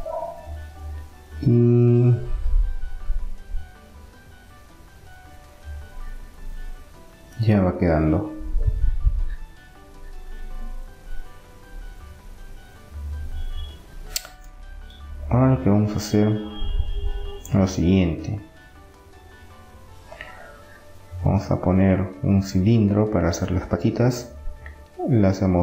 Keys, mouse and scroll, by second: 0.4-1.9 drag, 1.9-3.1 middle drag, 8.4-11.3 middle drag, 14.8-16.8 middle drag, 19.8-21.7 drag, 21.4 shift+a, 25.4-25.6 drag.